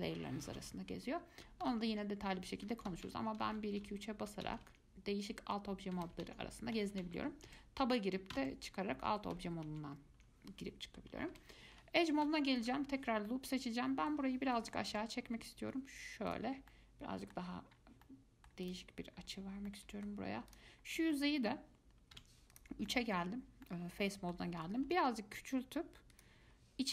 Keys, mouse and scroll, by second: 1.6-4.8 typing, 6.1 2, 6.3 3, 6.5 1, 7.0 3, 7.7 Tab, 8.5 Tab, 8.6 1, 9.3 2, 9.9 4, 10.2 1, 11.5 2, 12.8 alt+click, 13.5-14.7 middle drag, 14.7 g, 16.7 scroll down 2, 16.9 middle click, 17.6-18.0 scroll down 5, 18.2 middle click, 18.9 click, 19.3-19.7 scroll up 4, 19.7 scroll down 1, 19.9 middle click, 20.7 click, 21.0-21.3 scroll up 2, 21.3-22.3 middle drag, 22.3 3, 22.7 click, 23.1-25.1 middle drag, 25.1 s.